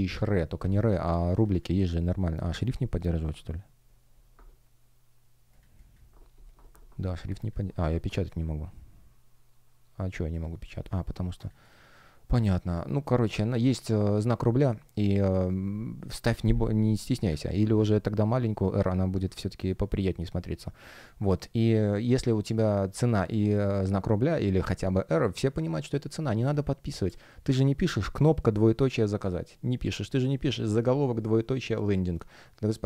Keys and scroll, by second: 19.2 space.